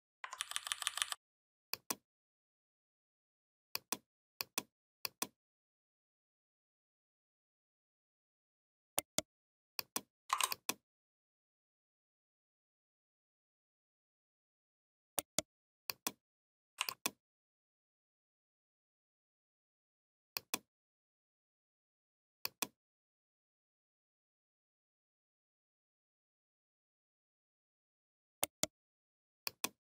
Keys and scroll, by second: 0.2 ctrl+[.